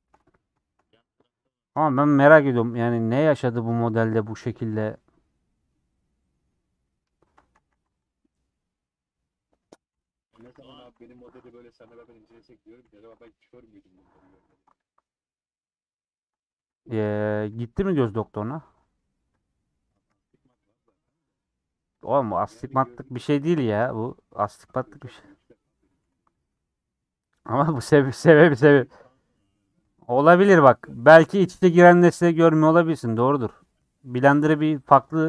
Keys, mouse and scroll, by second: 0.9 scroll up 2, 1.0-2.0 middle drag, 2.0-3.2 scroll up 2, 3.2 ctrl+Left, 4.1-6.5 middle drag, 6.5 scroll down 3, 6.8 middle click, 7.6 a, 8.5 scroll down 4, 9.4 middle click, 9.9 /, 10.4 middle click, 10.7 Tab, 11.2 h, 11.6 shift+middle click, 12.0 click, 12.8 /, 13.2 Tab, 13.5 middle click, 14.3 scroll down 2, 14.5 3, 14.8 alt+click, 15.1-16.7 middle drag, 16.7 c, 17.7 ;, 18.3-19.4 middle drag, 19.4 click, 19.6 middle click, 20.3 shift+click, 20.7 middle click, 21.0 scroll down 1, 21.4 middle click, 22.0 click, 22.2 middle click, 23.0 shift+click, 23.6-25.1 middle drag, 25.1-25.5 scroll up 5, 25.7 middle click, 26.0 s, 26.4 3, 26.8-28.8 middle drag, 29.8 ;, 30.3 middle click, 31.5 click, 31.8 middle click, 32.8 shift+Left, 33.2-34.4 middle drag, 34.4 shift+Left.